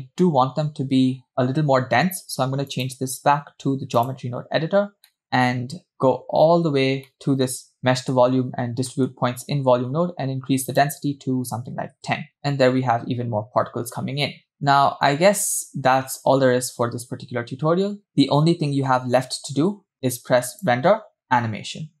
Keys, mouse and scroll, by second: 0.0 scroll down 2, 0.6-1.5 scroll down 1, 2.7-4.1 drag, 5.1 middle click, 5.9-6.5 scroll down 2, 7.0 scroll down 2, 7.1 middle click, 7.6-8.7 scroll up 5, 7.9 middle click, 9.0 middle click, 10.7-12.4 drag, 12.4 space, 14.5 scroll down 2, 14.8-16.3 scroll up 1, 17.4 space, 18.1 space, 20.5-22.0 drag.